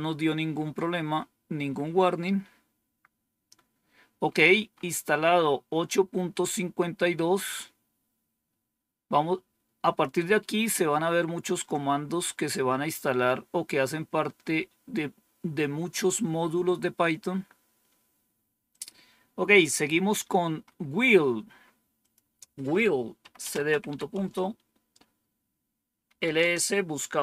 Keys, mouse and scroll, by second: 1.8-3.2 scroll down 3, 3.2-4.1 scroll down 1, 4.1 scroll up 2, 18.6 click, 21.9 click, 22.8-24.2 typing, 25.7-26.5 typing.